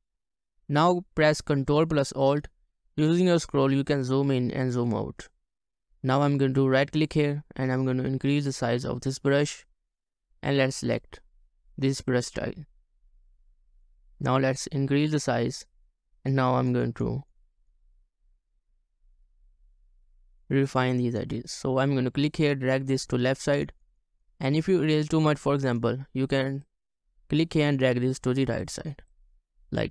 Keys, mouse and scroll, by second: 2.8 ctrl+alt+scroll up 1, 4.5 ctrl+alt+scroll down 1, 4.7 ctrl+alt+scroll up 1, 5.1 ctrl+alt+scroll down 1, 5.7 scroll up 1, 6.7 right click, 14.3 ctrl+alt+scroll up 1, 16.8 double click, 18.5-19.1 scroll down 2, 19.6 ctrl+alt+scroll up 1, 24.4 double click.